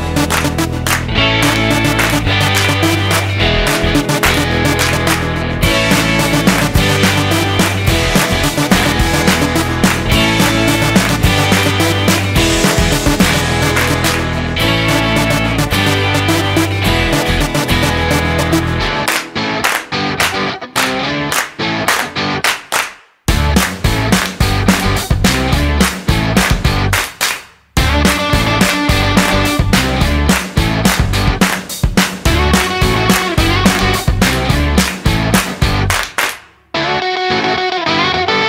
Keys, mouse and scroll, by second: 2.2 shift+a, 9.0 click, 13.0-13.5 scroll up 3, 13.5 middle click, 15.7 click, 17.0 click, 17.0-17.4 scroll down 6, 17.4 middle click, 18.1 middle click, 19.9 click, 21.0 click, 21.9 shift+a, 28.9 ctrl+shift+click, 30.6-31.2 scroll up 5, 32.6 scroll down 1, 34.5 middle click, 35.1-36.0 scroll up 7, 36.2 middle click, 38.1-38.4 scroll down 3.